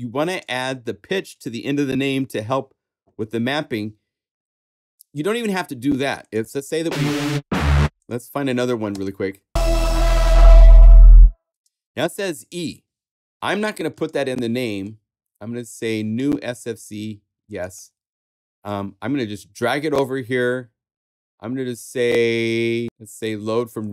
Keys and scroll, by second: 8.9 space, 11.5 space.